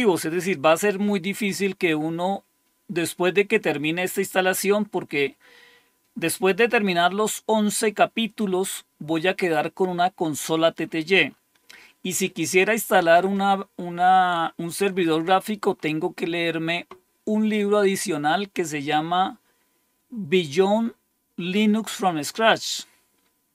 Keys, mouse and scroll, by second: 2.1 scroll down 2, 3.5 scroll down 2, 4.1-4.7 scroll down 4, 5.9-8.5 scroll down 6, 9.0-14.2 scroll up 4, 14.2-16.9 scroll up 3.